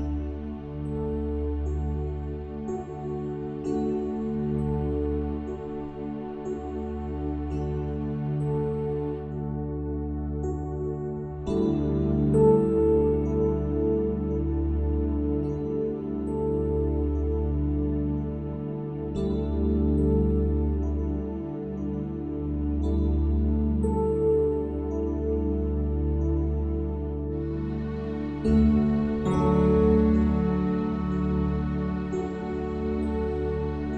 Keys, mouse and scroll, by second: 1.5 ctrl+r, 9.1 a, 9.3 a, 11.3-15.3 drag, 16.3 ctrl+z, 19.3-21.2 middle drag, 23.4 ctrl+r, 28.0 ctrl+r, 30.3-33.1 middle drag, 31.4 Tab, 33.4-33.9 drag.